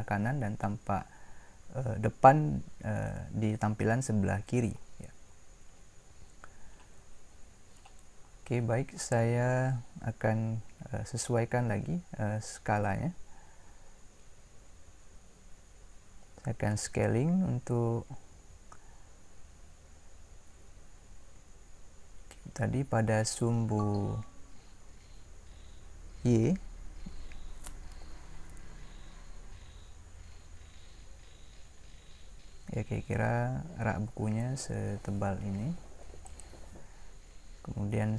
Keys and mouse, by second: 21.3 s.